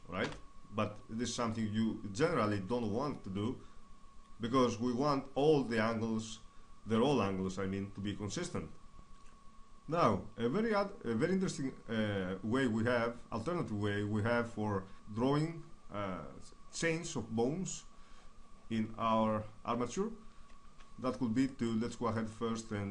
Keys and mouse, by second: 1.2-4.6 middle drag, 9.0 middle click, 15.0 KP_3, 15.8-19.6 middle drag, 21.6-22.9 right drag.